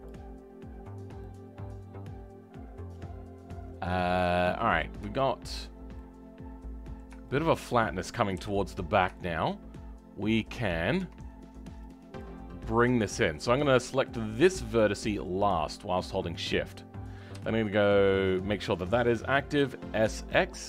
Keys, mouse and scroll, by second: 0.0 middle click, 0.7-1.2 scroll down 2, 1.2-5.7 middle drag, 5.7 scroll up 3, 5.9-8.3 middle drag, 8.3 KP_7, 9.1-10.5 shift+middle drag, 10.5-12.4 drag, 12.4-14.5 scroll up 2, 14.5 shift+click, 18.3 ., 19.5 s.